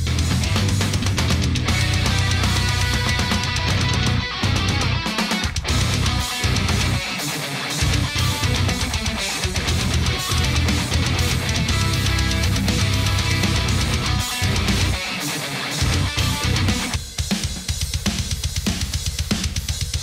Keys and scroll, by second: 16.1 shift+super+g, 18.3 shift+super+g.